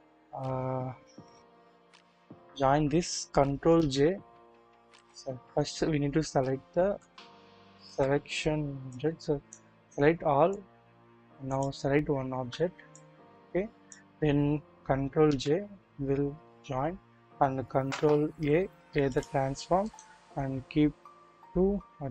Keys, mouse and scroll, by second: 3.7 ctrl+j, 4.9 click, 5.8-6.2 scroll up 1, 6.4 scroll down 1, 6.8 1, 6.9 KP_1, 7.8 KP_3, 8.9-9.6 scroll down 1, 10.1 scroll up 1, 11.4 shift+click, 12.9-14.0 shift+drag, 15.3 ctrl+j, 16.9-17.6 scroll down 1, 18.3 ctrl+a, 19.8-22.1 drag, 19.8 right click.